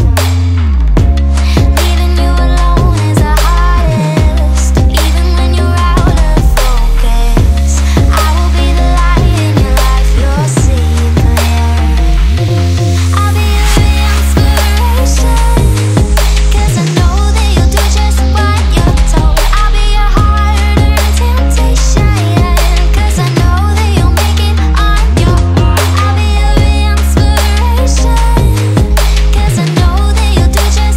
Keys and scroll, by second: 1.0 super+z, 1.8 super+z, 2.9 super+z, 3.8 super+s, 4.2 super+z, 5.2 super+z, 5.8 scroll, 6.0 super+z, 6.2 super+s, 6.7 super+z, 7.3 super+z, 8.1 super+s, 8.5 super+z, 9.2 super+z, 10.1 super+s, 10.8 super+z, 11.4 super+s, 12.6 super+z, 13.5 super+z, 14.7 super+s, 15.0 super+z, 15.9 super+s, 16.4 super+z, 17.3 super+s, 18.8 super+z, 20.1 super+s, 20.6 super+z, 21.0 super+z, 21.2 super+z, 21.5 super+z, 21.8 super+z, 22.3 super+z, 22.4 super+z, 23.0 super+z, 23.7 super+z, 23.8 super+z, 24.2 super+z, 24.3 super+z, 24.5 super+z, 24.6 super+z, 25.0 super+z, 25.4 super+z, 25.7 super+z, 25.9 super+z, 26.2 super+s, 27.0 super+z, 27.2 super+s, 29.3 super+z, 29.8 super+z.